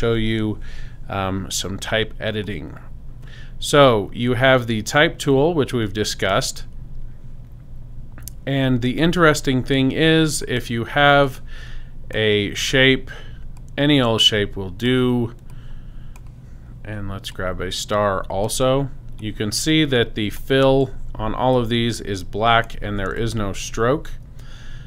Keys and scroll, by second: 23.1 super+space, 23.9 space.